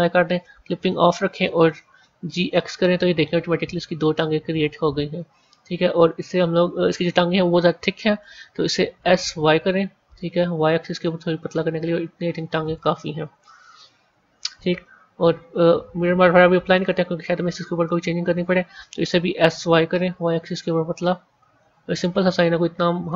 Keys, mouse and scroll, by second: 1.8 g, 6.1-8.8 middle drag, 8.8 s, 14.4 Tab, 16.6 click, 17.7-19.2 middle drag, 19.2 s, 23.0-23.1 middle drag.